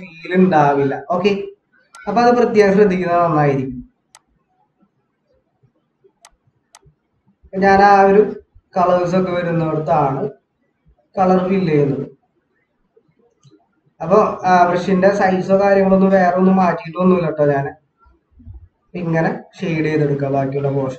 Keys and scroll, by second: 0.2 ctrl+=, 3.3 ctrl+=.